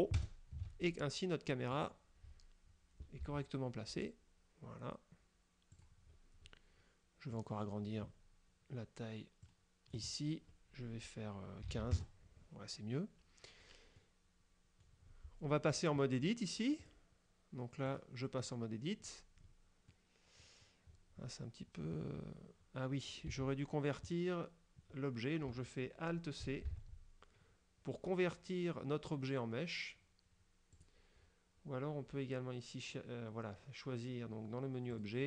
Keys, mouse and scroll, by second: 0.2 ctrl+alt+KP_0, 1.8 right click, 3.3 g, 5.8 click, 6.2-7.4 scroll up 2, 7.4 right click, 9.5 click, 11.7 KP_1, 11.8 KP_5, 12.0 KP_Enter, 14.1-15.1 drag, 16.9 click, 18.0 click, 19.1 scroll down 1, 19.5-20.0 scroll up 1, 20.0 click, 20.5 middle click, 21.0 scroll up 2, 23.4 Tab, 26.8 alt+c, 30.8 click, 35.0 click.